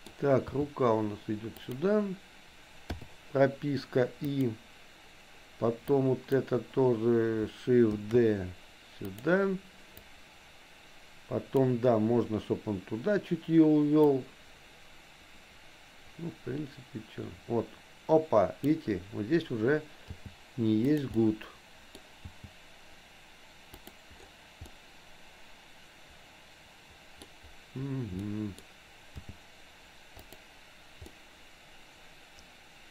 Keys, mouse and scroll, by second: 0.4 g, 2.9 i, 4.4 click, 5.9 click, 8.0 shift+d, 10.0-11.8 drag, 14.2-18.8 drag, 20.2 g, 21.2 middle click, 21.2 scroll up 1, 21.9 scroll down 1, 22.4 g, 24.7-27.3 middle drag, 28.3 middle click, 29.2 g, 31.2-32.9 middle drag.